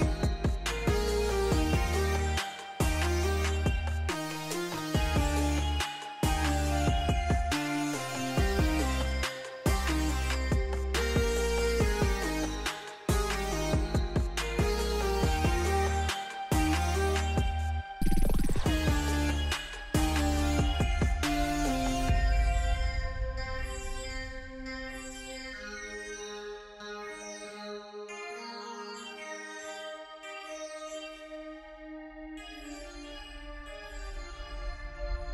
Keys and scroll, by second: 4.7-6.5 typing, 10.1 1, 10.4 Return, 16.4-17.6 typing, 19.6-21.3 typing, 26.2-27.2 typing, 27.4 Return, 30.6-33.0 typing.